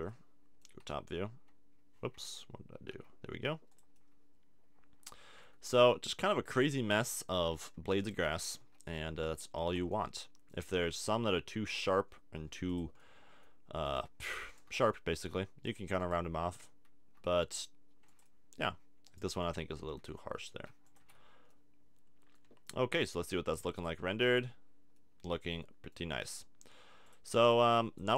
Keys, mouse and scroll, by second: 0.1-1.5 drag, 0.9 f, 2.2 z, 2.9 g, 3.8 super+click, 5.2 a, 5.4 Tab, 7.5 Tab, 8.0 middle click, 8.4-9.8 drag, 8.6 g, 9.9-11.7 middle drag, 11.3 g, 11.7 right click, 12.8-13.8 drag, 13.8 middle click, 14.9-17.1 middle drag, 17.1 g, 17.6 scroll down 1, 18.2 click, 18.6 click, 19.1 middle click, 20.0 click, 20.0 g, 20.9 a, 21.0 Tab, 21.5 middle click, 23.7 click, 24.4-25.6 drag, 25.6-27.1 middle drag, 27.1 click.